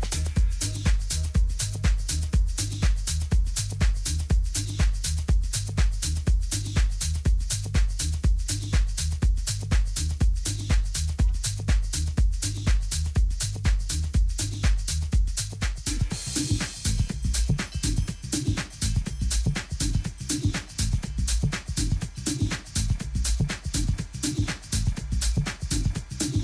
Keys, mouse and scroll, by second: 1.3 a, 1.6 a, 2.2-4.0 middle drag, 4.0-5.7 right drag, 5.7 a, 6.0-7.7 drag, 8.1 a, 8.6 Tab, 9.9 ctrl+a, 12.5 Tab, 13.2 a, 13.8 right click, 14.7 middle click, 18.3-24.0 middle drag, 24.1 KP_3, 24.5 z, 25.3-26.4 middle drag.